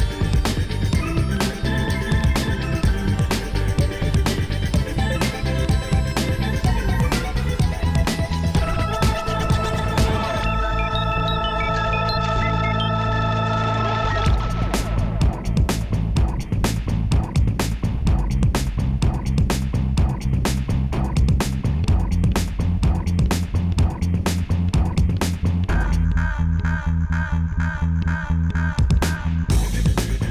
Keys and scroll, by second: 8.1 3, 8.5 Return.